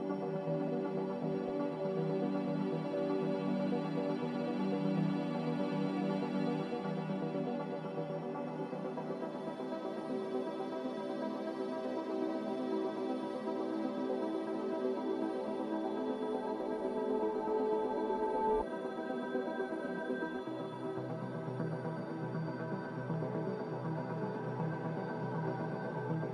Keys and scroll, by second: 6.1 z, 12.2-13.7 typing, 20.3 z.